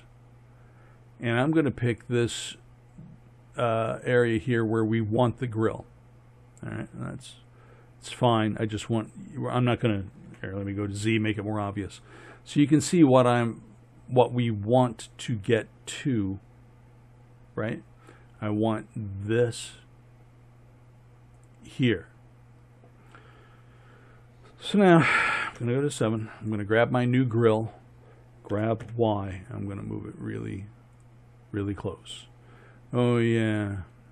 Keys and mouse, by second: 10.3 z, 19.3-23.8 drag, 25.6 KP_7, 28.6 g, 33.6-34.1 middle drag.